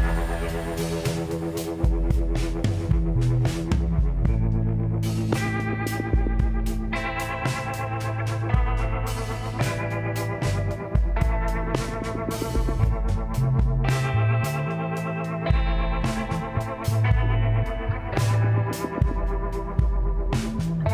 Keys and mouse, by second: 1.3 Tab, 2.2 click, 3.2 g, 6.4-10.9 drag, 12.3-14.2 drag, 13.5-17.1 middle drag, 14.7 KP_1, 17.1 Tab, 17.7 a, 18.7 g, 20.4-20.9 drag.